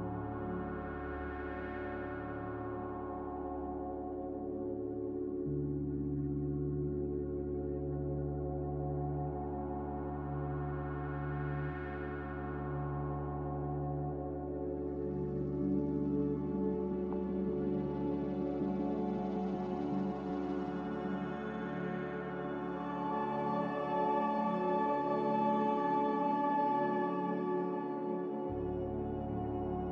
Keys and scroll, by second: 8.7 a, 9.4 a, 28.4 n.